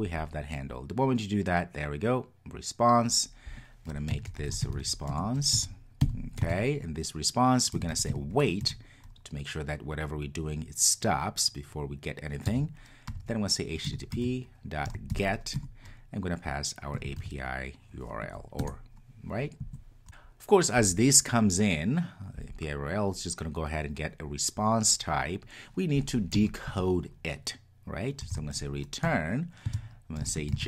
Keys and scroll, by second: 5.1 Return, 13.9 Return, 20.0 Return, 29.0 Return.